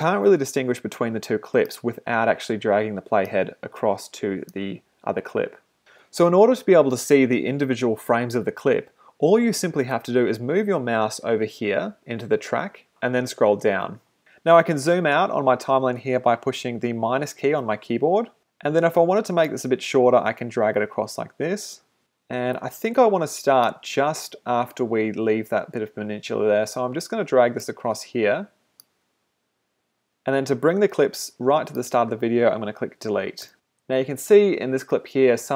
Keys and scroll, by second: 17.4 -, 33.4 BackSpace, 33.8 space, 35.4 space.